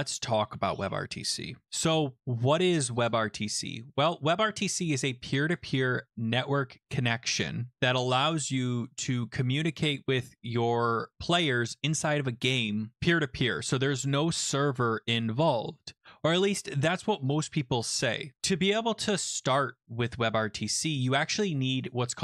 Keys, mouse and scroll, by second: 21.9 click.